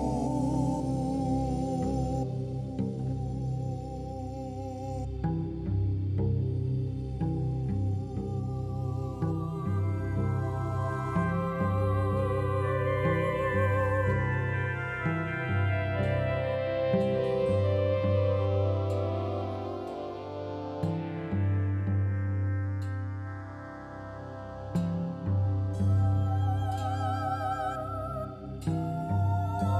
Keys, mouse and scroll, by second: 2.1-2.6 shift+drag, 3.3 ctrl+j, 4.2 click, 11.7-17.2 drag, 11.7 shift+a, 12.0 r, 18.8 click, 22.3 s, 23.6 s.